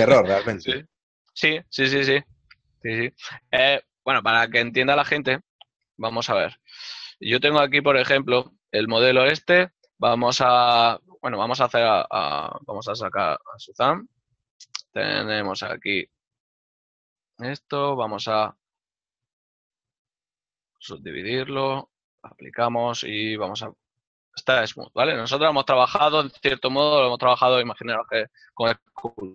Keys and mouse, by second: 6.0 ctrl+middle click, 8.1 a, 10.7 click, 11.5 x, 11.8 click, 16.3 click, 23.0 t, 26.2 KP_Decimal, 26.9 middle click.